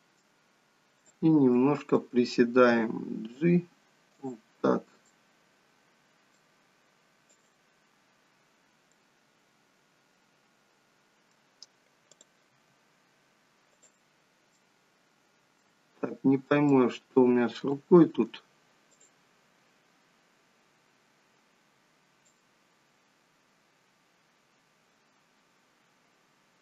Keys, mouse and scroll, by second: 1.1 click, 1.7 middle click, 2.6 g, 5.1 middle click, 7.3 click, 8.9 middle click, 12.4 click, 12.5 g, 14.5 middle click, 16.2-17.6 scroll up 2, 16.7 middle click, 17.7 shift+middle click, 17.7 shift+scroll up 1, 18.9 click, 20.2-21.5 scroll down 5, 22.3 click.